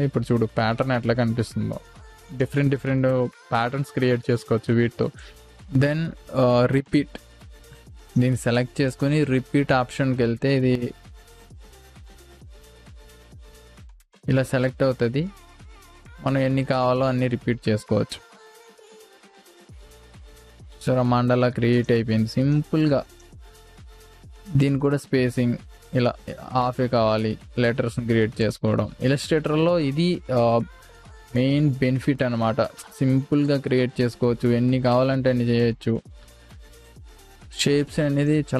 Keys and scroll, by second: 0.5 space.